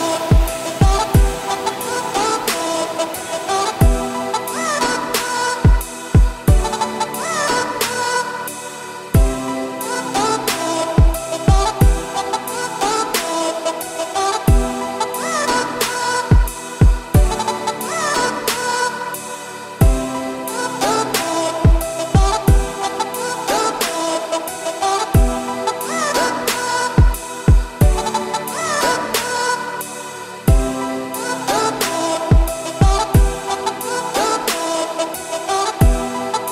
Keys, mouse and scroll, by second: 2.3 scroll up 1, 2.9 click, 7.8 middle drag, 8.0-8.4 scroll up 2, 8.4-8.7 shift+middle drag, 8.7-9.0 scroll up 2, 9.0-9.4 middle drag, 9.4 `, 9.9 shift+middle drag, 10.0-11.0 scroll up 3, 11.0-11.4 shift+right drag, 11.4 shift+a, 12.7-13.4 scroll up 4, 12.9 shift+middle drag, 13.4 r, 16.0 Tab, 16.3-16.6 scroll down 2, 16.6 s, 20.6-21.7 scroll up 3, 21.7-22.7 scroll down 1, 22.7-24.8 scroll down 1, 26.0 s, 29.0 s, 31.0 s, 32.0 shift+middle click, 32.4 scroll up 1, 32.6 Tab, 33.3 g, 34.5 Tab, 34.7-35.9 scroll up 1, 35.9 s.